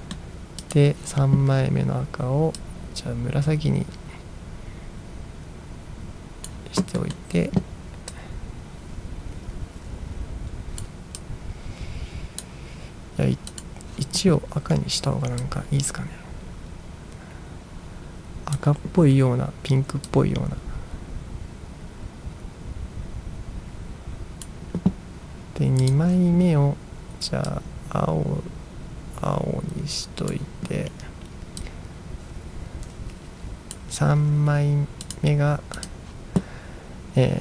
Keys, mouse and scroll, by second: 0.0 middle click, 0.7 click, 2.7-6.5 drag, 7.0 middle drag, 8.2-10.9 drag, 11.3-12.5 drag, 13.6 click, 15.5-18.6 drag, 20.1-24.5 drag, 25.9 click, 27.6-30.4 drag, 31.7-33.8 drag, 35.1 click, 35.9 click.